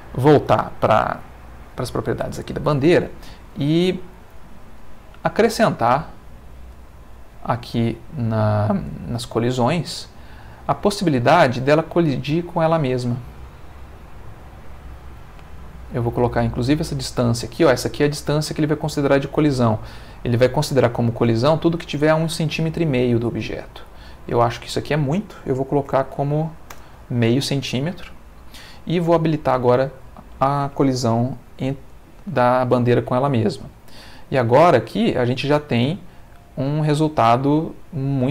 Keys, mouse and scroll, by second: 1.2 click, 4.8 middle click, 5.7-6.7 middle drag, 6.9 middle click, 9.4 click, 9.8 middle click, 15.9 click, 16.5 click, 16.9 click, 17.7 Escape, 23.7 click, 24.5 click, 25.9 0, 26.7 Return, 29.4 click, 31.4 ctrl+s, 32.7 space.